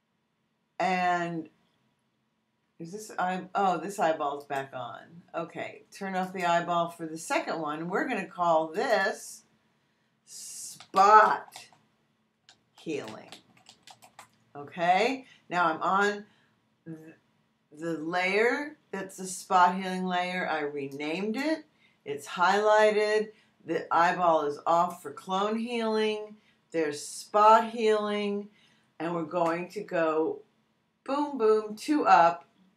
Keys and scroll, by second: 10.5-14.5 typing.